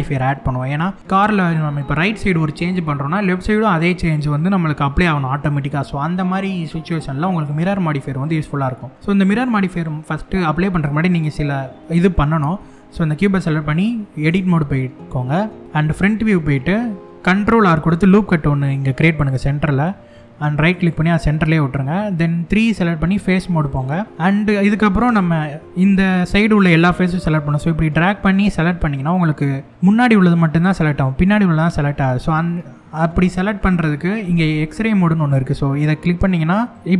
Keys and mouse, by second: 11.8 middle click, 13.9 Tab, 15.6 KP_1, 17.6 ctrl+r, 20.4 right click, 23.2 click, 24.0 click, 25.8-28.2 drag, 29.0 middle click, 32.0 KP_1, 36.3 click.